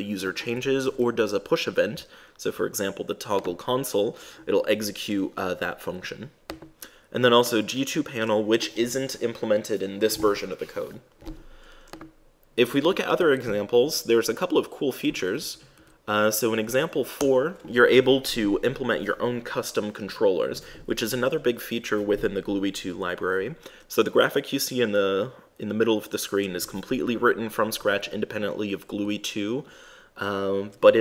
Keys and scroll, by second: 13.5 super+`, 17.4 super+Return.